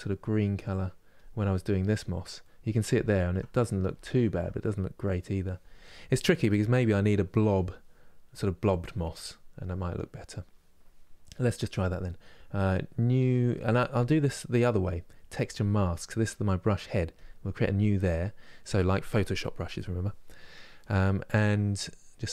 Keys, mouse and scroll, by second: 0.9-2.1 drag, 2.1-16.9 middle drag, 16.9-22.3 drag.